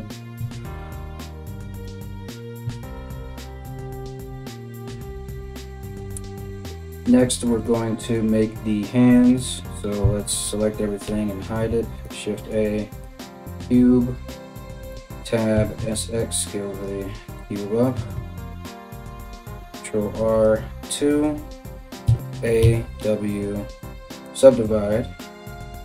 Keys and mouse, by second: 0.0 Tab, 1.1 shift+s, 2.2 Tab, 3.0 KP_1, 9.6 a, 10.7 h, 11.5 shift+a, 14.5 Tab, 15.1 s, 17.5 s, 19.2 ctrl+r, 21.6 a, 22.2 w.